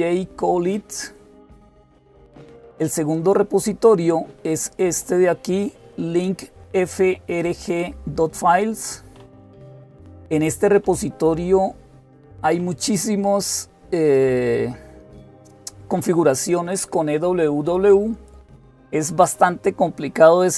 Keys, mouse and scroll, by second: 3.0 click, 12.7-13.7 scroll down 2.